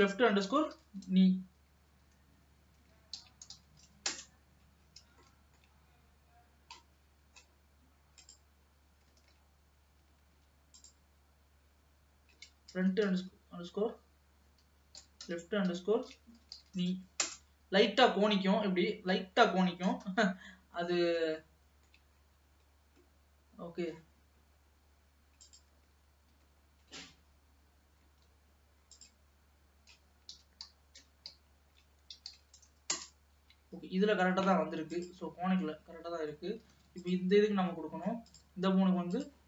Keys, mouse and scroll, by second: 5.3-8.2 shift+middle drag, 8.2 click, 9.2 ctrl+z, 10.8-13.9 drag, 16.8 e, 18.3-19.4 middle drag, 19.4-20.4 scroll down 1, 20.4 KP_7, 21.0-21.6 scroll up 4, 21.6 shift+middle click, 22.5-23.3 scroll up 1, 23.3-24.3 scroll up 1, 24.3-25.4 scroll up 1, 25.5 click, 25.8 ctrl+z, 26.3 ctrl+z, 27.4-28.3 scroll down 2, 29.0-32.1 drag, 32.5 e, 34.9-35.9 drag, 35.9 middle click, 36.8 ctrl+s, 37.3 ctrl+click, 38.0 middle click, 38.3 click, 39.1 click.